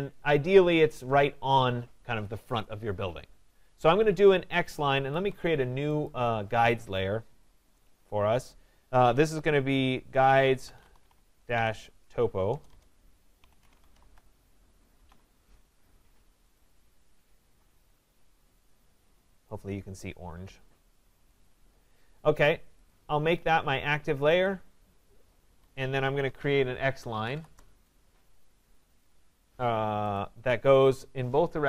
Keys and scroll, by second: 5.0 Escape, 12.5 BackSpace, 25.5 Escape, 27.4 Return.